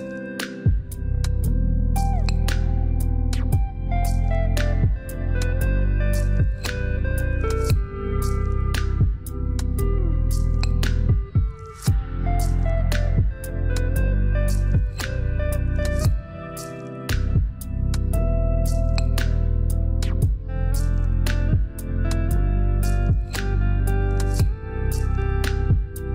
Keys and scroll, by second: 1.0 Return, 18.2 3, 19.5 Return, 24.5 6, 24.9 7, 25.8 Return.